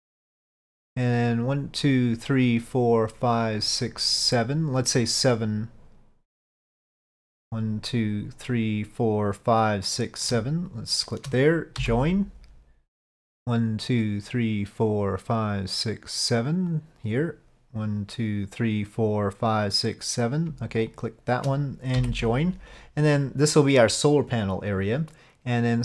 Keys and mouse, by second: 10.8 shift+click, 16.8 click, 21.0 shift+click.